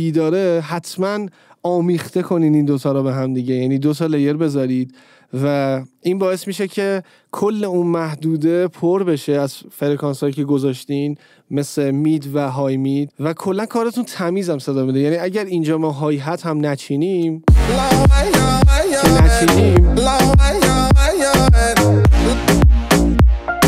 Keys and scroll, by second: 17.5 space.